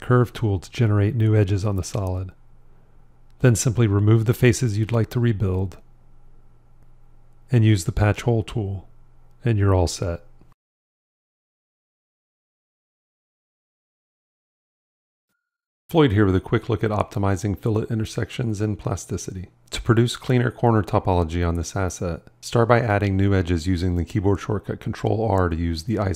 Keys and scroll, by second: 0.5 shift+i, 6.5 shift+x, 23.4 ctrl+r, 24.6 Tab.